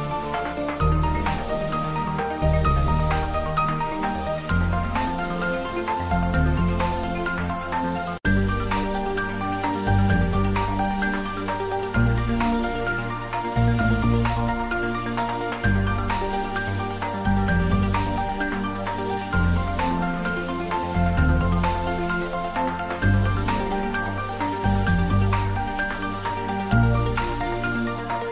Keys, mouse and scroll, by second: 0.6 shift+click, 4.8 middle click, 8.7 middle click, 9.5-10.9 ctrl+middle drag, 10.9 space, 13.4 space, 15.2 space, 17.1 space, 19.3 space, 20.1 click, 22.0 click, 23.1 middle click, 27.5 click.